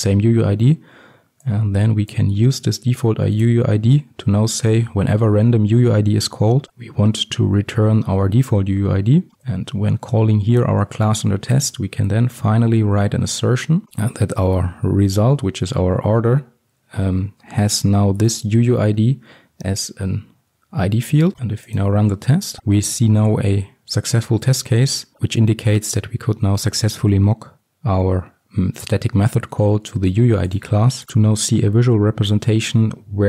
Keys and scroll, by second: 3.5 Return, 12.8 Return, 13.8 ctrl+v, 15.1 Return, 18.3 Return, 18.4 ctrl+alt+l.